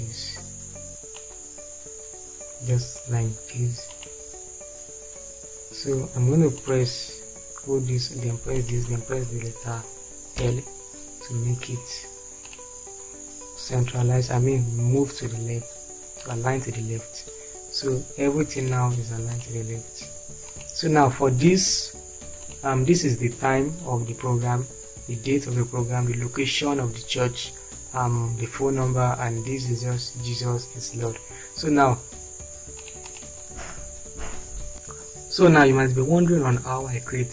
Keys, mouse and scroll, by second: 10.4-10.8 typing.